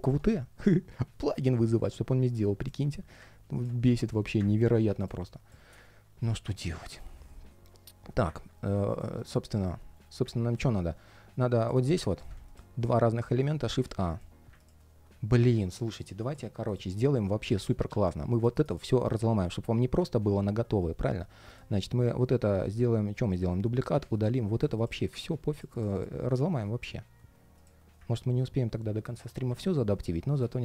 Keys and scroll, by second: 8.9 alt+i, 9.3 ctrl+shift+3, 9.8 ctrl+shift+3, 18.1 shift+super+g, 18.7 shift+super+g, 23.0 super+d, 26.1 alt+super+b, 27.9 ctrl+shift+3.